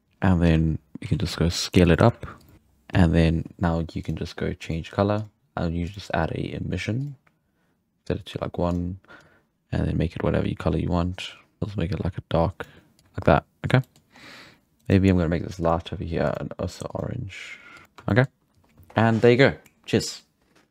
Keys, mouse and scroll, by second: 0.4-2.5 typing, 4.0-4.7 drag, 5.1-8.7 drag, 13.2-13.8 scroll up 1, 13.8-14.1 shift+middle drag, 14.1-14.4 scroll up 5, 14.8 right click, 15.6 click, 16.2 click, 16.8 click, 17.7 click, 17.8 shift+middle click, 17.8 scroll down 5, 18.0-20.7 shift+middle drag.